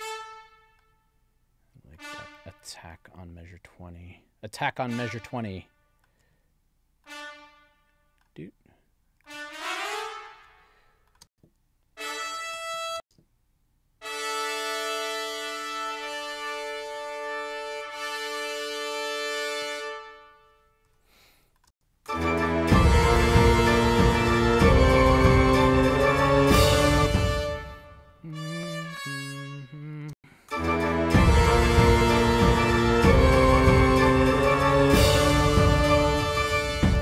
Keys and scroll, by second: 11.2 space, 12.5 space, 19.4 space, 21.7 space, 26.9 space, 30.1 space, 36.6 space.